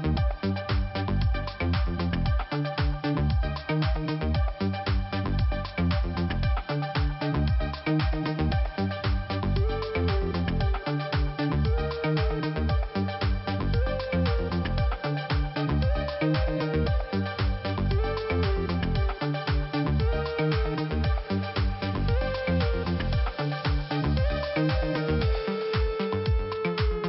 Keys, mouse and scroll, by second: 0.8 click, 0.9 click, 1.8 click, 3.2 click, 4.0 click, 5.7 click, 8.4 click, 9.7 click, 11.6 click, 11.7 click, 12.6 click, 16.1 click, 16.2 click, 16.8 click, 16.9 click, 17.5 click, 17.6 click, 19.2 click, 21.9 click, 21.9 click, 25.5 click, 25.5 click, 26.6 click.